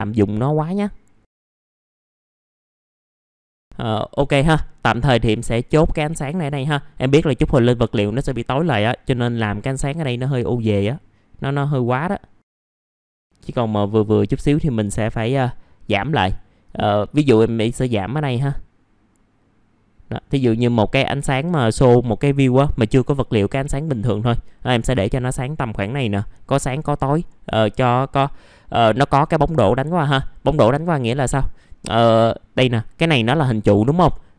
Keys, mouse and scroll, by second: 3.3 middle click, 3.4 scroll down 1, 3.6-4.0 scroll up 1, 4.4 scroll down 1, 4.8 middle click, 5.4 click, 12.9 click, 13.6-25.1 drag, 25.1 click, 30.0-30.7 scroll up 1, 33.4 middle click.